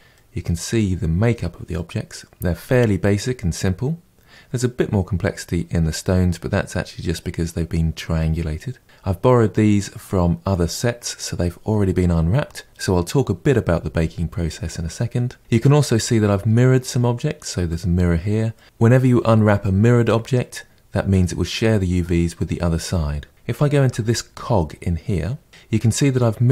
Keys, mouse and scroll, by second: 0.1-4.7 middle drag, 15.6-20.7 middle drag, 23.3 click, 23.8 KP_Decimal, 24.7-25.4 scroll down 9.